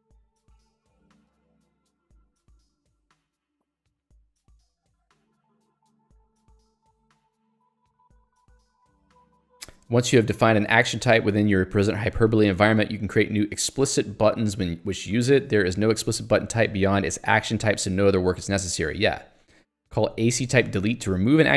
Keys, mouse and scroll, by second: 0.3 k.